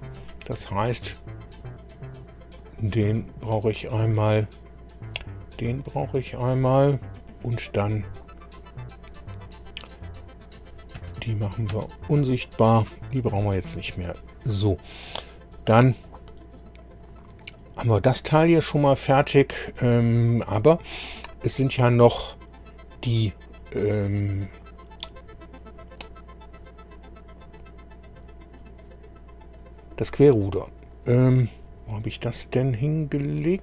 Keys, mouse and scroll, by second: 0.9 click, 2.6 click, 4.0 click, 6.4 click, 7.8-8.1 scroll down 1, 10.6 click, 11.0 space, 11.4 click, 11.7 space, 14.8-16.0 middle drag, 22.2 scroll up 1, 24.4 scroll up 1, 25.2 scroll down 1, 25.8 scroll down 1, 31.6-32.2 scroll up 2.